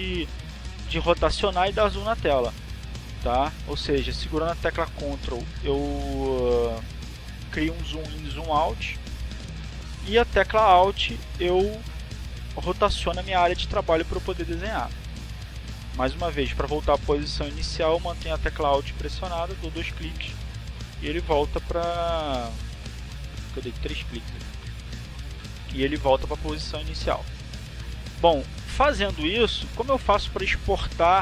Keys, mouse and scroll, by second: 5.8 click, 6.8-15.8 ctrl+drag, 17.1-21.9 alt+drag, 26.1 alt+click, 28.3 alt+click, 29.1 alt+click, 29.8 alt+click, 30.5 alt+click.